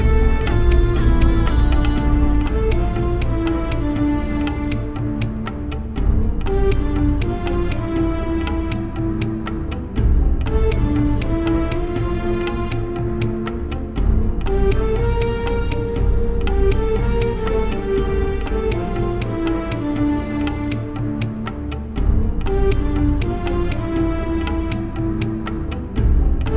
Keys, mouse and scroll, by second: 0.7-2.7 middle drag, 2.9-4.1 middle drag, 5.7 middle click, 6.8-9.4 middle drag, 8.2 ctrl+x, 9.7-11.6 right drag, 10.1 ctrl+x, 11.6 ctrl+x, 11.6 middle click, 13.3 ctrl+x, 15.0-16.7 right drag, 15.2 ctrl+x, 15.5 Tab, 16.7 middle click, 17.7 z, 18.0-19.3 middle drag, 19.3 z, 20.0 z, 20.4 KP_1, 23.3 click, 23.8 Return, 24.9-25.9 middle drag, 25.8 z.